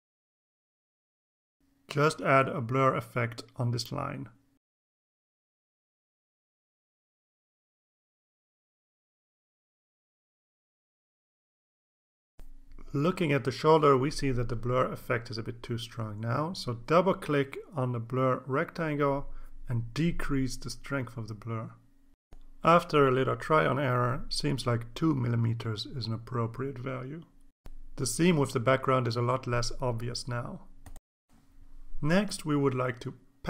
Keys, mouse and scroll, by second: 2.6 right click, 5.9 click, 8.2-8.8 drag, 9.1-10.1 drag, 10.6-11.5 drag, 12.8-16.1 drag, 17.3 click, 19.2 click, 20.2 KP_1, 21.3 KP_Enter, 22.4 click, 23.7 Left, 24.3 shift+Right, 25.3 KP_2, 25.7 KP_Enter, 26.3 KP_2, 28.1 click, 29.7 click, 30.4 ctrl+s.